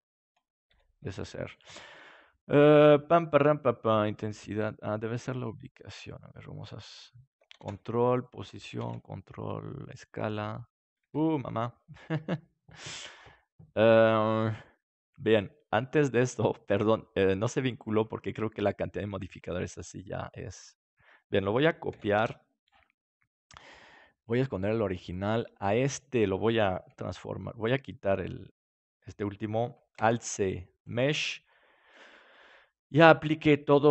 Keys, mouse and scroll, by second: 0.7 ctrl+z, 7.5 ctrl+a, 8.7 ctrl+a, 11.1 ctrl+z, 15.3-20.6 right drag, 20.6-22.1 middle drag, 21.9 shift+d, 24.2-27.4 drag, 28.5-30.9 drag, 29.9 alt+c, 31.5-33.2 middle drag.